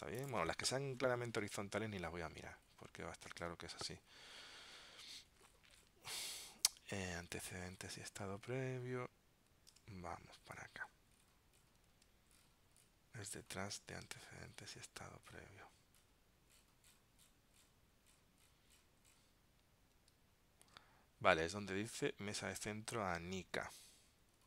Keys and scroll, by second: 3.5 super+Tab, 9.8 super+Tab, 12.0 super+Tab, 14.1 super+Tab, 20.8 super+Tab, 22.7 super+Tab.